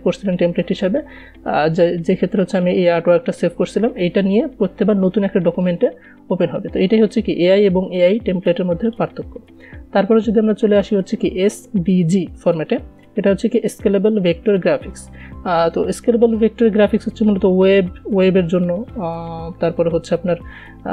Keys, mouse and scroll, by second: 9.3 click.